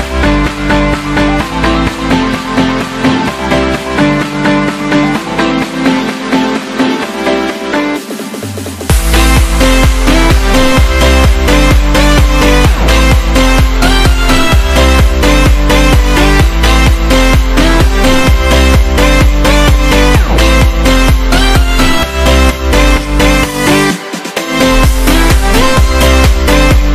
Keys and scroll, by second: 1.7 b, 3.4-4.1 typing, 17.9 x, 23.5 x.